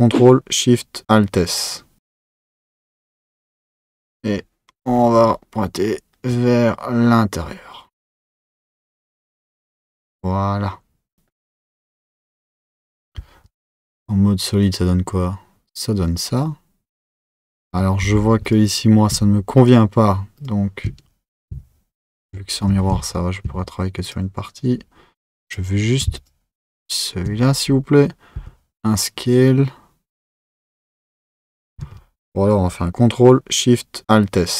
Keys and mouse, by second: 0.8 alt+shift+s, 13.2 z, 18.4 click, 19.6 alt+shift+click, 20.4 alt+shift+click, 24.1 click, 25.4 click, 26.1 alt+shift+click, 26.7 alt+shift+click, 28.4 s, 31.9 z, 33.3 alt+shift+s.